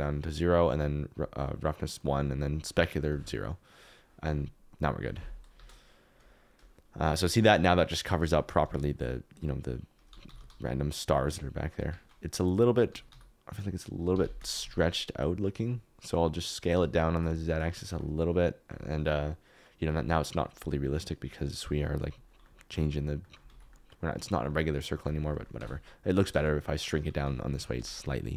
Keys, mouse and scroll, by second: 1.1 click, 2.5 click, 5.5 KP_0, 8.6 alt+z, 10.1 r, 10.2 x, 10.3 x, 11.7 Escape, 12.8 s, 13.0 y, 14.1 Escape, 14.4 s, 14.6 z, 17.0 shift+right click, 20.4 KP_Decimal, 22.1 KP_Decimal, 23.2 middle click, 23.4 alt+z, 23.8 middle click, 25.5-27.2 typing, 27.7 Escape.